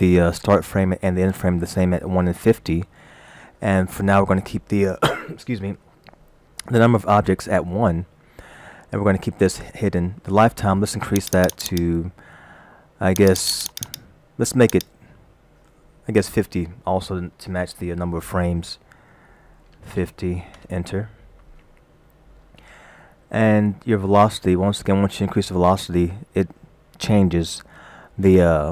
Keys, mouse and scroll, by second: 11.2 click, 11.4 click, 11.6 click, 11.7 click, 13.2 click, 13.4-14.0 click, 13.7 click, 13.8 click, 15.1 click.